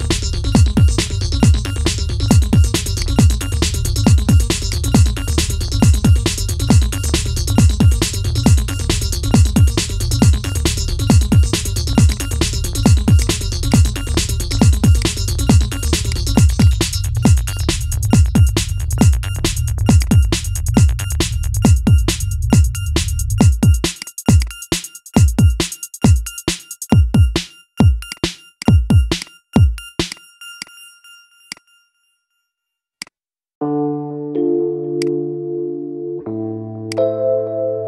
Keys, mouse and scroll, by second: 0.7 shift+click, 2.0 ctrl+p, 4.4 click, 4.7 scroll up 1, 4.8-6.7 middle drag, 6.7 scroll up 4, 7.1-8.9 middle drag, 8.9 scroll down 4, 9.4-10.4 shift+middle drag, 10.4 scroll up 2, 11.0-11.9 middle drag, 11.9 click, 12.9-14.3 drag, 14.7 click, 15.8-18.8 drag, 19.7 click, 20.3-22.2 middle drag, 22.2 scroll down 1, 22.9-23.8 shift+middle drag, 23.8 click, 24.1 shift+click, 25.5 ctrl+j, 26.5 scroll up 3, 27.0-27.8 shift+middle drag, 27.8 click, 28.3 shift+drag, 28.9 click, 29.8-30.8 drag, 30.8 scroll down 4, 31.3 click, 31.6 scroll up 2, 32.7 click, 34.7-36.7 drag, 37.6-37.8 drag.